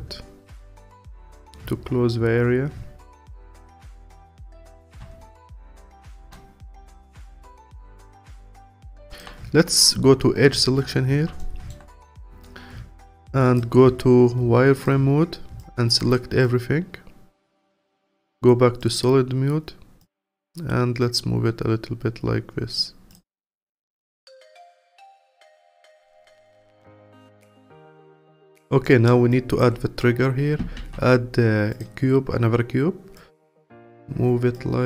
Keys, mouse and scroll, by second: 0.9-5.2 alt+drag, 5.2-6.1 scroll down 2, 6.1 alt+middle click, 6.3-7.4 scroll down 1, 7.4 alt+middle click, 8.3-8.8 scroll up 3, 8.8-11.4 alt+drag, 11.4 alt+middle click, 12.1-14.8 alt+drag, 15.6 click, 16.4-18.9 alt+drag, 20.0 click, 23.1 click, 23.5 scroll down 2, 23.7 Tab, 23.9 click, 24.2-24.9 scroll down 3, 24.9-27.9 alt+drag, 28.2-28.8 scroll up 4, 28.8-29.3 alt+middle drag, 29.3-30.8 alt+drag, 30.8 shift+a, 32.1-33.2 scroll down 1, 33.2 click, 34.5 click.